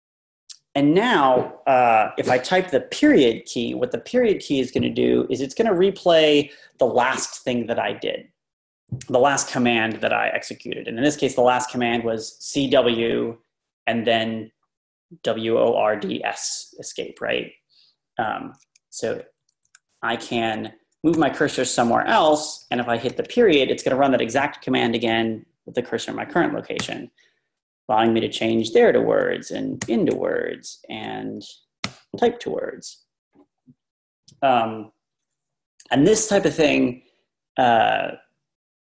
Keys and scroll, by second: 1.8 Up, 2.2 Down, 2.6 Left, 2.9 Left, 3.1 Left, 3.2 Left, 18.5 Up, 19.4 typing, 21.1 Down, 21.6-22.3 typing, 28.0 Down, 28.3 typing, 28.6 Left, 29.9 Left, 29.9 ., 30.1-31.0 Left, 31.9 ..